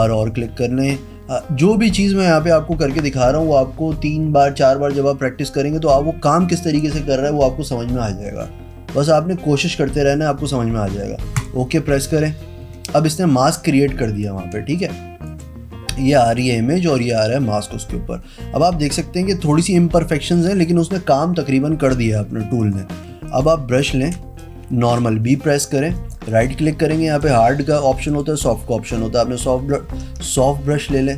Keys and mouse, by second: 11.5 click, 14.7 space, 14.9 click, 16.4 click, 17.1 click, 22.3 z, 22.5 click, 22.8 click, 23.4 click, 23.9 b, 24.3 space, 24.5 click, 26.1 right click, 27.4 click, 28.2 click, 29.0 click, 29.4-31.1 typing.